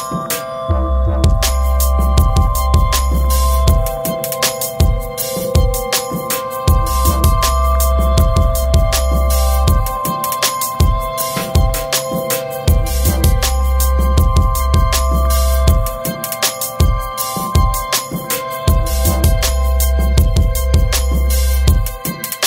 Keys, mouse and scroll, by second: 13.8 click, 16.1 right click, 16.6-16.9 scroll up 1, 22.2 click.